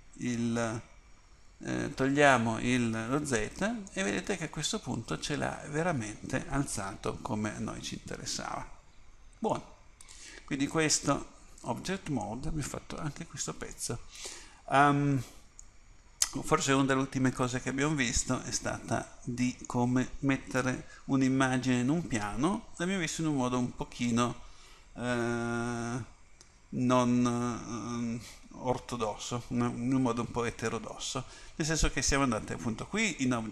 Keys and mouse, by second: 3.3 z, 4.2-5.6 middle drag, 9.7-11.7 middle drag, 11.7 Tab.